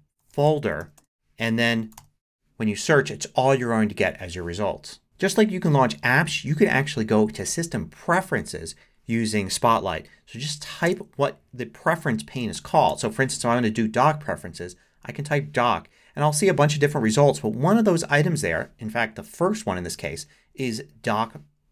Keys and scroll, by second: 0.0-2.5 typing, 12.2-13.4 typing.